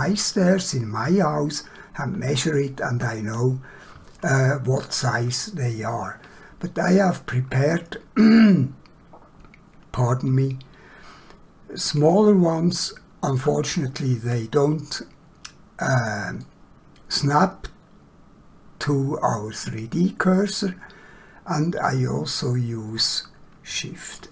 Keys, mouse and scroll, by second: 7.6 click, 12.0 click, 13.8 scroll up 1, 16.4 middle click, 24.2 shift+a.